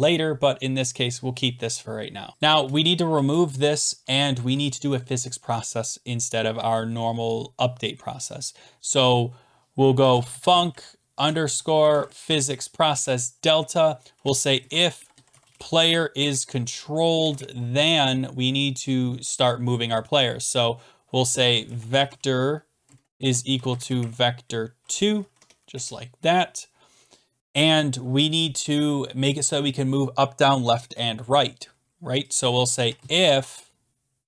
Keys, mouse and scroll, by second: 1.0 click, 1.0 click, 1.6-2.2 scroll, 2.3 shift+click, 2.4 shift+click, 3.2 BackSpace, 9.7-12.4 typing, 12.9 Return, 13.9-16.0 typing, 16.2 Tab, 17.1 typing, 17.3 Return, 21.1-24.5 typing, 25.2 Down, 25.3 Tab, 25.7 Return, 27.1-27.9 typing, 29.5-30.2 scroll down 9, 30.8-31.3 scroll down 5, 32.4 click, 32.6-34.2 typing.